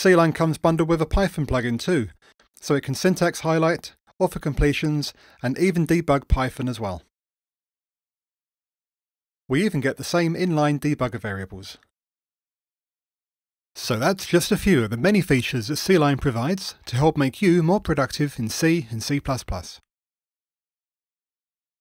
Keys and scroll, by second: 6.0 ctrl+shift+d.